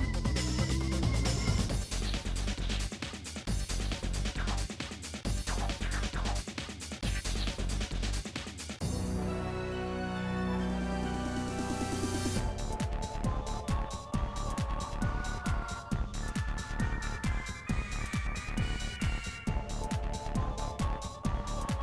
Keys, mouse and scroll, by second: 0.3 g, 2.6 shift+scroll up 2, 2.8 shift+middle click, 3.0 shift+middle click, 3.4 g, 5.6-6.1 scroll down 4, 6.4 e, 7.8-8.2 scroll up 4, 8.0 shift+middle click, 8.2 shift+middle click, 8.7 g, 9.4 scroll down 1, 9.6 middle click, 9.9 KP_Decimal, 10.1-10.5 scroll down 5, 10.5 click, 11.4 ctrl+z, 11.6 KP_Add, 11.8 middle click, 12.5 scroll down 1, 12.8 e, 14.7-15.8 middle drag, 15.8 2, 15.9 click, 16.7-17.7 drag, 17.7 ctrl+b, 18.6 scroll, 18.7-19.8 middle drag, 19.8 click, 20.4 l, 20.7 KP_1, 21.0-21.8 shift+middle drag.